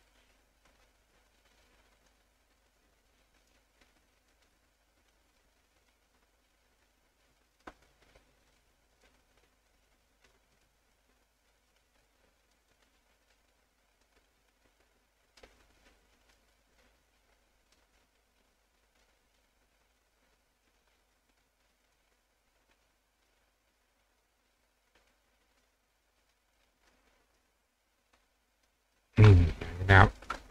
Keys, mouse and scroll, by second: 0.1 click, 1.7 click, 2.6 click, 3.4 click, 4.3 click, 5.1 click, 6.4 click, 7.5 click, 8.5 click, 9.7 click, 10.6 click, 10.9 click, 11.6 click, 14.1-15.4 drag, 15.9 click, 16.8-17.8 drag, 19.1 click, 20.7 click, 21.8 click, 22.7 click, 23.8 click, 25.1-26.6 drag, 26.8 click, 27.3 click, 28.2 click, 28.9 click, 30.1 click.